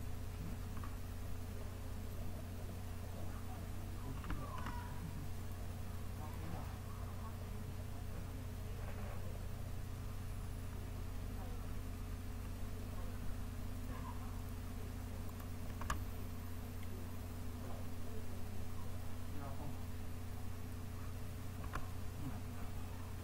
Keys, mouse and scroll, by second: 0.7-1.8 drag, 3.0-4.9 drag, 9.4 click, 12.1-13.3 drag.